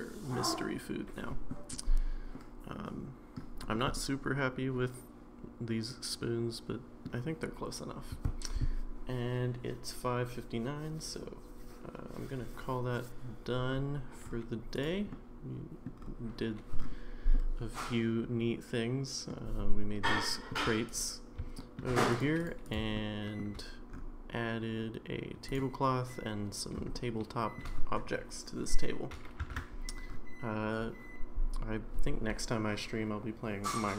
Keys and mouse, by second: 2.4-3.3 middle drag, 3.9-7.1 middle drag, 14.7 click, 15.1-15.9 middle drag, 17.3-19.3 middle drag, 20.1-20.5 shift+middle drag, 21.6 shift+middle drag, 22.4 click, 22.6 click, 22.9-23.4 shift+middle drag, 25.5 click, 26.9-27.5 shift+middle drag, 29.6 ctrl+s.